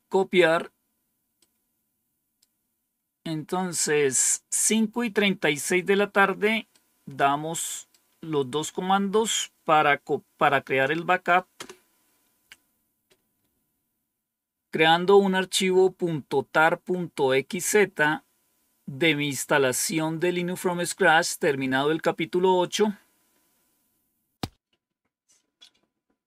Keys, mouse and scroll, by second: 1.3-2.4 right drag, 6.6-7.8 right drag, 11.5 Return.